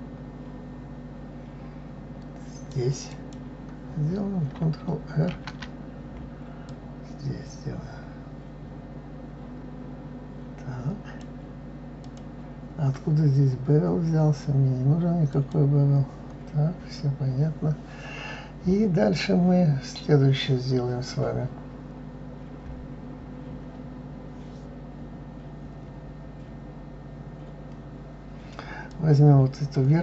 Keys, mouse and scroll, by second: 5.3 ctrl+r, 15.3 click, 28.8 click.